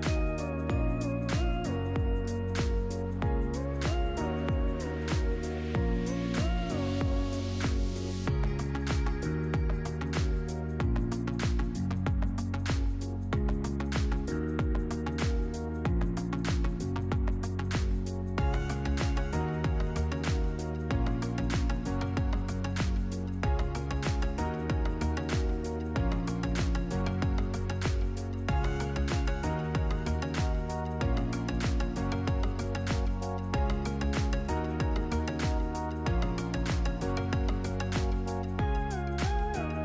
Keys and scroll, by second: 5.0 v, 5.8 p.